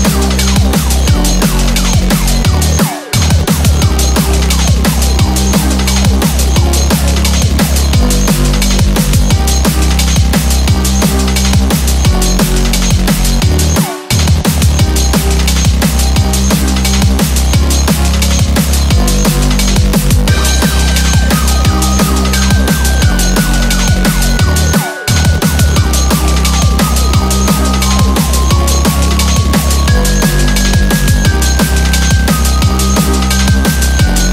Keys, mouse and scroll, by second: 0.9 middle click, 2.1 ctrl+2, 2.5 middle click, 3.3-3.6 scroll up 3, 3.5 middle click, 5.0 click, 5.9 click, 6.2 click, 7.1 click, 7.1-7.6 scroll down 2, 7.6 middle click, 8.7 click, 11.6 click, 12.5 click, 13.0 click, 13.6 scroll down 2, 13.8 middle click, 14.1 scroll up 4, 14.3 middle click, 14.9 shift+middle click, 15.1 middle click, 15.5 shift+middle click, 15.9 middle click, 16.1 middle click, 16.9-17.2 scroll down 2, 17.2 shift+middle click, 17.4 middle click, 20.8 middle click, 21.4 click, 21.5 Tab, 21.9-22.2 scroll up 3, 22.2 middle click, 22.8 KP_1, 23.6 shift+middle click, 23.8 scroll up 2, 24.2 shift+middle click, 25.0 ctrl+r.